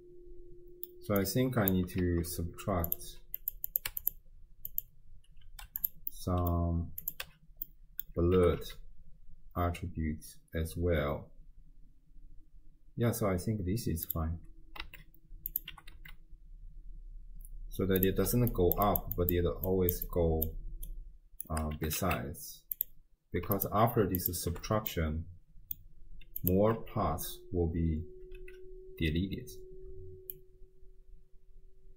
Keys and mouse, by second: 0.0 middle click, 0.2 click, 0.6 right click, 1.2 click, 2.0 shift+d, 3.5 click, 4.7-5.9 drag, 6.1 middle click, 7.1 click, 7.3 m, 7.7 click, 8.5 g, 14.9 s, 15.7 g, 18.3-21.8 typing, 18.5 click, 18.9 click, 19.1 click, 19.7 click, 20.1 click, 20.9 click, 23.6 ctrl+shift+drag, 24.3 ctrl+shift+click, 25.1-25.8 middle drag, 26.4 click, 26.9 m, 28.4 m, 30.4-31.9 shift+drag.